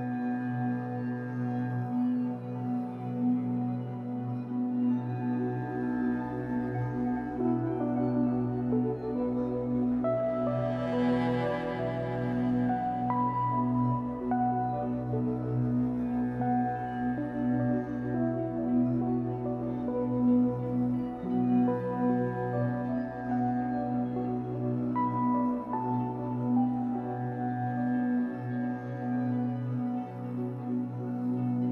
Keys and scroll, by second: 1.8 3, 5.3 Escape, 5.8 1, 6.7 Escape, 8.7 Escape, 21.7 Escape, 23.3 1, 25.2 r, 27.2 w.